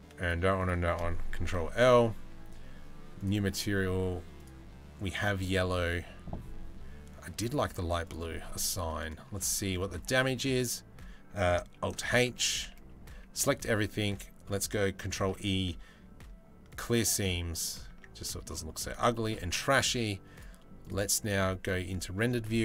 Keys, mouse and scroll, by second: 1.1 ctrl+l, 2.8 click, 4.0 click, 4.8-7.1 drag, 8.4 middle click, 9.8 a, 11.5 alt+h, 12.1 a, 12.4 a, 14.5 a, 14.8 ctrl+e, 17.6 Tab, 17.8 middle drag, 18.4 middle drag, 18.7 shift+middle click, 19.9-20.4 scroll down 1.